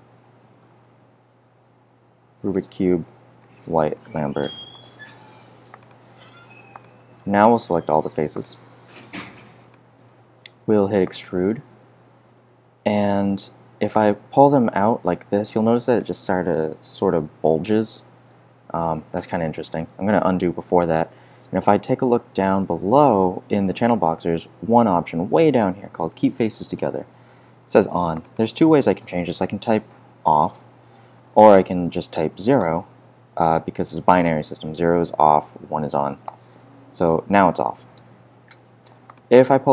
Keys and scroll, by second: 0.0-5.1 typing, 19.6 z.